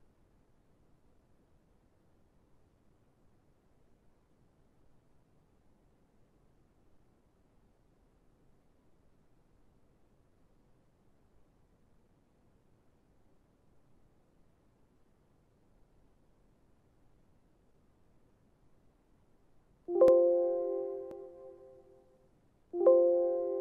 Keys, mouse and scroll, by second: 0.1 right click, 3.8 right click, 8.0 right click, 11.2 right click.